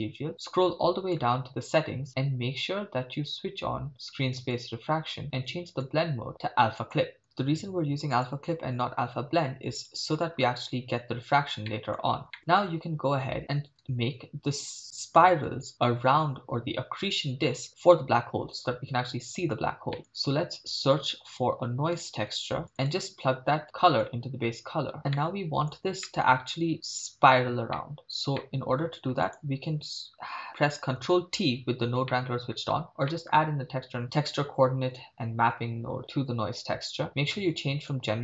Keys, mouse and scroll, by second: 0.3 click, 4.4 click, 5.7-6.9 drag, 8.1-9.8 drag, 11.7 middle click, 12.2-13.0 scroll up 6, 12.3 middle click, 13.4 middle click, 14.8-15.2 middle drag, 19.9 middle click, 20.0 shift+a, 23.6 click, 25.2-25.7 middle drag, 26.0-26.4 shift+middle drag, 27.7 middle drag, 28.0-28.4 scroll up 3, 28.4 middle click, 29.3 click, 31.3 ctrl+t, 32.1-32.6 shift+middle drag, 32.7-34.3 scroll down 1, 36.0 middle click, 37.9-38.2 drag.